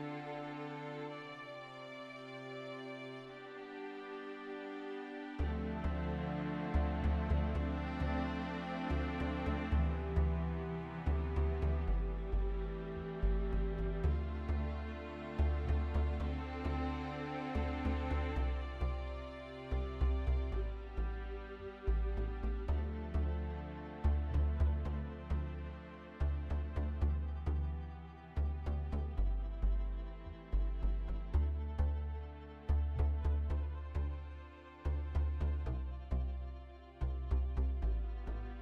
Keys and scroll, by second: 7.4 ctrl+z, 16.0 ctrl+z, 19.9 F3, 28.2 ctrl+z, 30.7 ctrl+z, 32.9 ctrl+z.